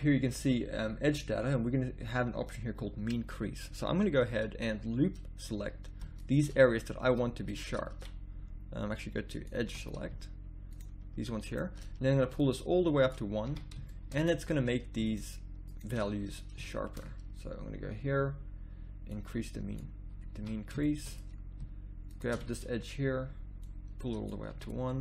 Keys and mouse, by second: 9.6 a, 13.5 a, 20.1 middle click, 20.4 a, 22.1-23.4 drag, 24.5 a, 24.9 middle click.